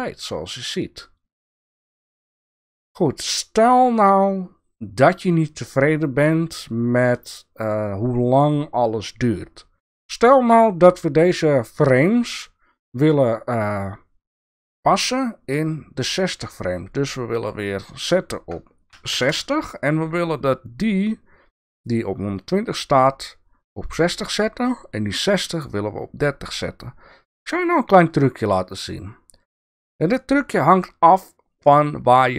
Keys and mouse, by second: 18.0-20.0 drag, 28.1 click, 29.8-32.3 drag.